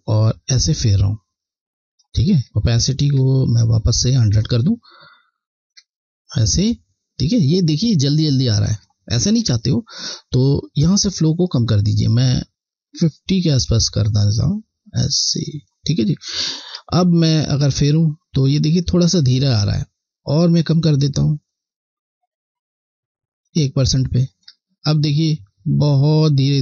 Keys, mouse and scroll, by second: 5.6 alt+click, 11.1 click, 16.6 alt+click, 20.9 click, 24.3 alt+click.